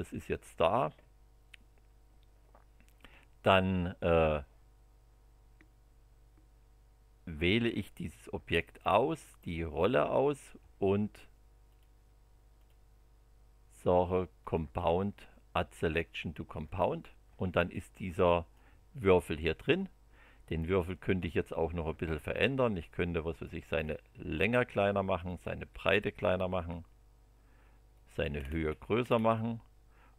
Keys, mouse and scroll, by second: 7.6 scroll down 1, 8.4 click, 9.7 ctrl+click, 11.7 click, 12.5 click, 14.4 click, 16.6 click, 17.7-18.7 middle drag, 20.4 click, 23.3 click, 23.7 scroll down 2, 25.2 click, 25.7 scroll down 2, 26.7 scroll down 2, 27.9 click, 28.4 scroll up 2, 29.0-29.3 scroll up 2.